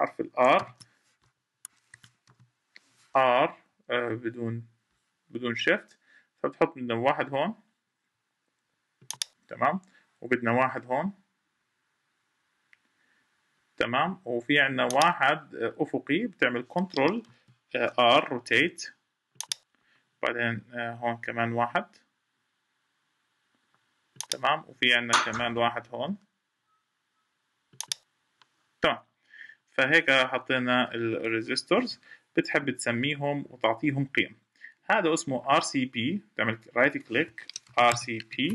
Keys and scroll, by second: 17.0 ctrl+r, 31.5 Escape.